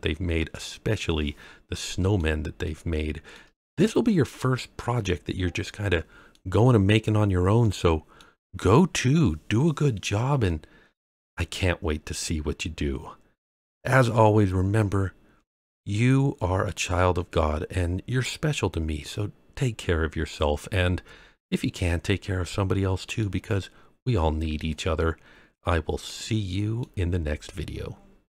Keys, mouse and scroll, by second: 2.6-3.3 shift+middle drag, 3.8 scroll down 1, 4.2-6.3 middle drag, 7.6-8.2 middle drag, 9.4-9.9 scroll up 1, 10.4-13.5 middle drag, 19.0-23.2 middle drag, 24.6-26.8 middle drag, 24.6-26.8 scroll down 1.